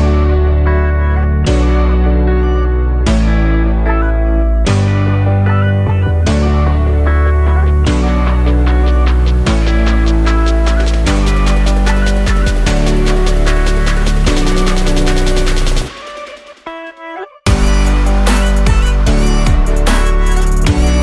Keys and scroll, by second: 1.0 alt+0, 2.8 ctrl+0.